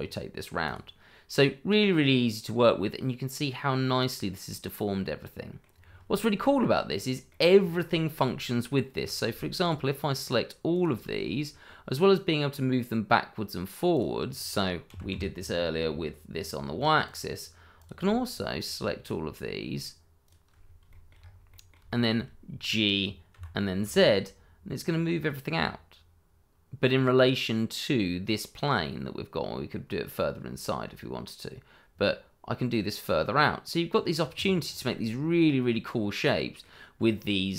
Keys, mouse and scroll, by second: 0.6 click, 1.4 middle click, 5.8 scroll down 1, 6.1 shift+middle click, 6.4-6.9 shift+scroll up 1, 6.9 middle click, 7.5 scroll down 1, 7.9 shift+middle click, 8.3-8.7 scroll up 1, 9.0 click, 10.7 shift+click, 11.4 scroll down 1, 11.8 middle click, 12.6-13.7 scroll up 1, 13.9 click, 14.8 g, 15.1 y, 17.0 click, 18.3 shift+click, 20.2 shift+click, 20.6 scroll down 1, 20.9 shift+middle click, 21.1-21.5 shift+scroll up 1, 21.5 middle click, 21.9 shift+middle click, 23.0-23.3 scroll down 1, 23.3 g, 23.8 z, 34.4 click, 34.7 scroll up 1, 34.9 middle click, 36.9-37.5 scroll down 1.